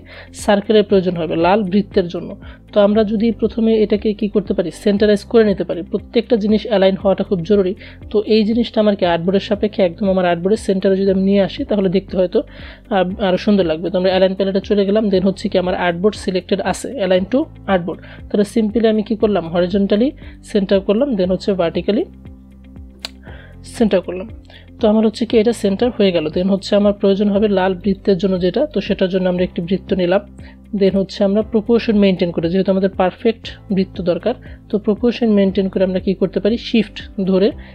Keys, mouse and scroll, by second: 13.9 click, 18.7 click, 22.1 click, 26.1 right click, 29.1 click, 35.7-37.7 shift+drag.